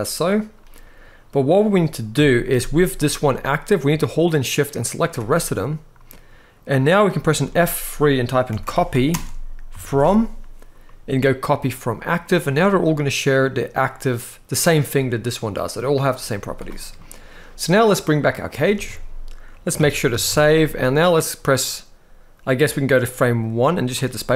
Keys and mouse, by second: 1.9 KP_1, 2.5 z, 3.8-4.7 shift+drag, 5.0-5.8 middle drag, 7.1 F3, 12.1-12.4 middle drag, 14.4 click, 16.1 z, 16.7-17.0 middle drag, 17.8 click, 18.4 alt+a, 19.5 ctrl+s, 19.8 ctrl+s, 20.0 ctrl+s, 20.3-20.9 middle drag, 22.3 click, 23.1-23.6 drag, 23.9 middle click, 24.2 space.